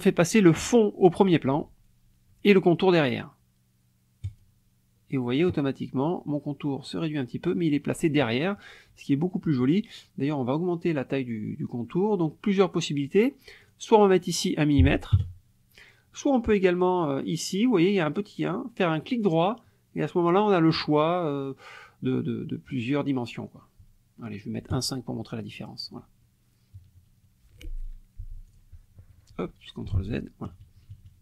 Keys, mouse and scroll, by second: 4.2 click, 13.6 click, 14.8 KP_1, 15.1 KP_Enter, 19.0 right click, 24.7 click, 26.7 KP_Subtract, 28.5 click, 29.9 ctrl+z, 30.4 ctrl+KP_Subtract.